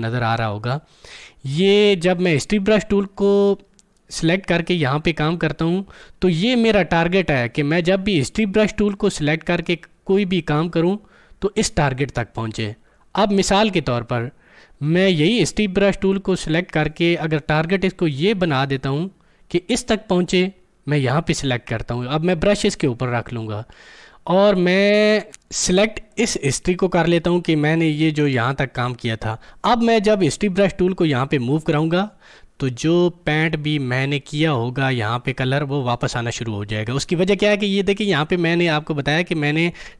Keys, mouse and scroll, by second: 18.5 click, 21.1 click, 26.0 click.